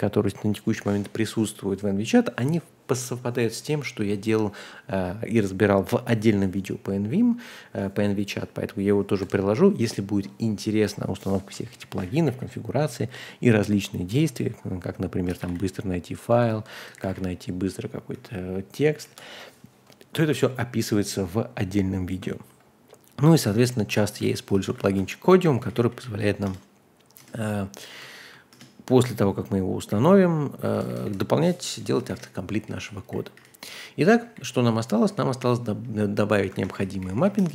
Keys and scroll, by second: 11.5-12.7 typing, 15.3-17.0 typing, 18.1 Escape, 19.0 Escape, 23.4 super+c, 24.2 a, 24.5 Return, 24.6 super+v, 24.9 Escape, 25.3-26.4 typing, 26.4 Return, 27.2 Return, 28.5 Return, 29.9-37.3 typing, 32.1 ctrl+h, 36.5 ctrl+h.